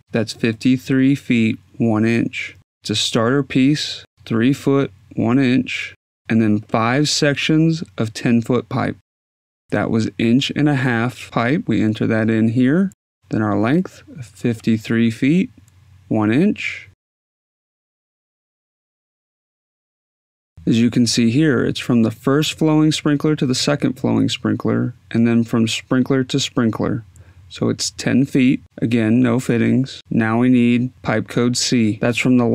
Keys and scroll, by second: 11.3-15.3 typing, 15.8 Tab, 18.6-19.7 typing, 28.0 0, 28.3 Tab.